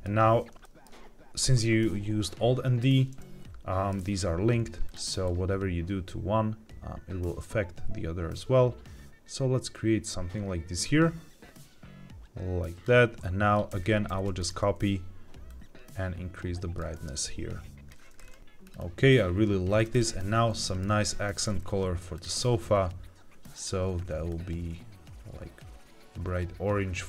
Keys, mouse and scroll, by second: 0.5 shift+middle click, 2.7-3.8 middle drag, 4.8 click, 13.8 ctrl+c, 14.0 ctrl+v, 14.3 click, 18.1 scroll down 2, 18.4 middle click, 18.6-19.1 scroll up 2, 19.7 scroll up 1, 19.8 click, 20.6 shift+middle click, 21.0-21.7 scroll down 1, 22.0 click, 23.4 click.